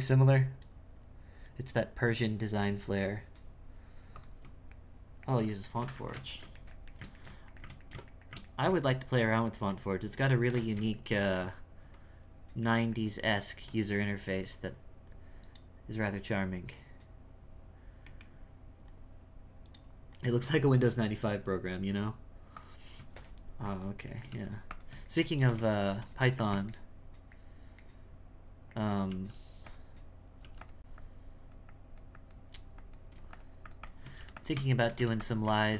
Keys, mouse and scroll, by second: 4.8-15.8 shift+middle drag, 23.3 shift+middle click, 25.1 shift+middle click, 25.4 g, 25.7 shift+middle click, 26.2 f, 26.7-29.1 shift+middle drag, 29.1 f, 30.4 f, 30.9-34.1 drag, 34.8 shift+middle click, 35.6-35.7 ctrl+shift+middle drag.